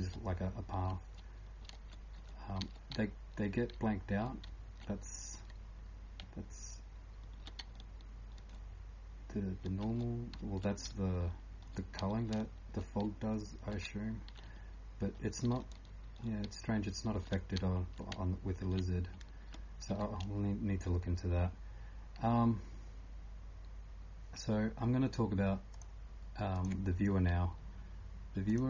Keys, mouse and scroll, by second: 0.0-8.4 typing, 13.0-28.6 typing, 25.7 click, 28.5 click.